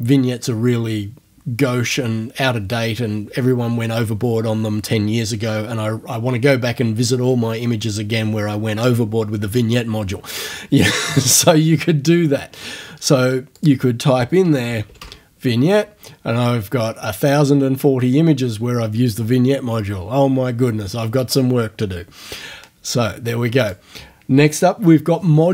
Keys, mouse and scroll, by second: 13.6 click, 14.3-15.5 typing, 23.6 click.